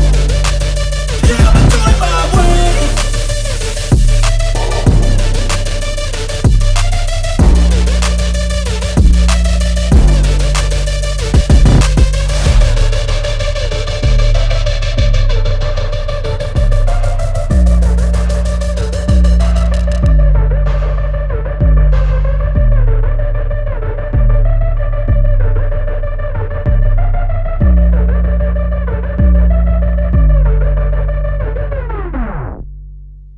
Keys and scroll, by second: 6.5 alt+BackSpace, 12.3 ctrl+space, 17.2 p, 17.4 n, 17.9 space, 20.3 ctrl+a, 20.4 ctrl+BackSpace, 22.8 shift+p, 23.1 shift+n, 23.2 shift+g, 23.3 shift+space, 24.2 Return, 26.2-26.9 typing.